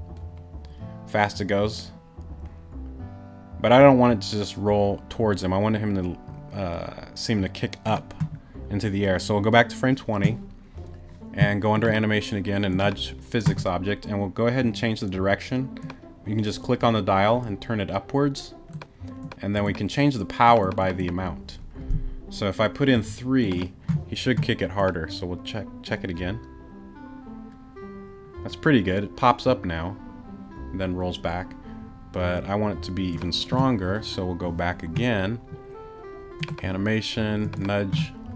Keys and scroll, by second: 22.9 3.